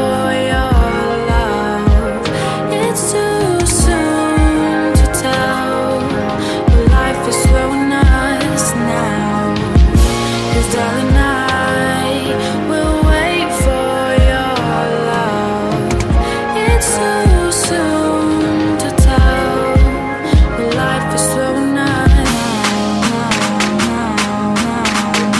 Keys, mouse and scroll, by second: 0.0-2.6 typing, 3.5-4.6 drag, 4.3-5.6 typing, 6.2 click, 7.0 Tab, 7.3 click, 8.4 typing, 11.6-14.5 drag, 13.3 Delete, 14.7 typing, 16.1-17.6 typing, 18.6 Return, 19.8 click, 21.5 right click, 22.9 click, 24.1-25.3 right drag.